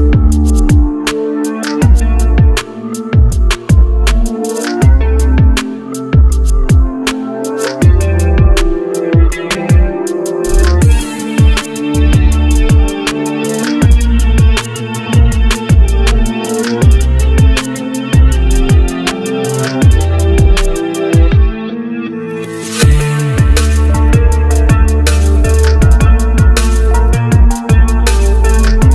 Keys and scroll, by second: 8.5-11.3 typing, 22.5 k, 24.8 x, 28.0 1.